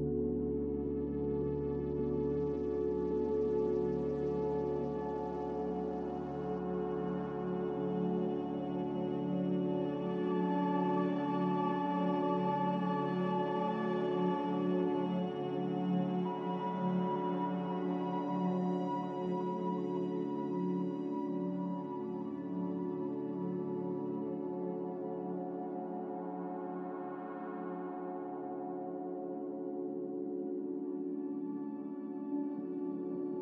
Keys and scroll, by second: 2.2 5, 5.6-6.3 typing.